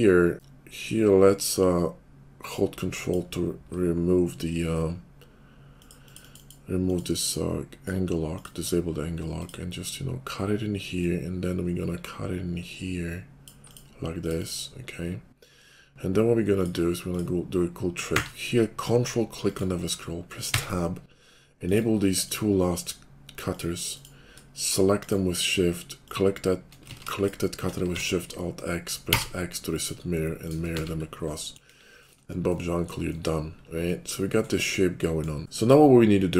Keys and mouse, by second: 11.0-16.4 middle drag, 11.0-15.9 right drag, 16.4 click, 16.6-18.1 middle drag, 18.1-19.9 drag, 18.1 q, 21.1-24.9 drag, 24.9 shift+middle click, 25.1 shift+click, 25.9 shift+middle click, 26.1-28.0 shift+drag, 26.9 ctrl+z, 27.8 alt+x, 30.7 shift+2, 31.7 KP_5, 34.7-36.3 drag, 35.4 ctrl+z.